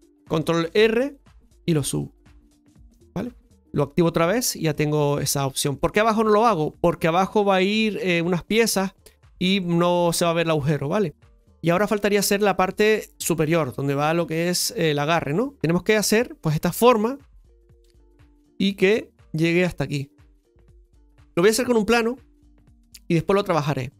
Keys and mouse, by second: 3.8 click, 4.7 middle click, 5.4 Tab, 5.7-6.4 middle drag, 15.6 KP_Divide.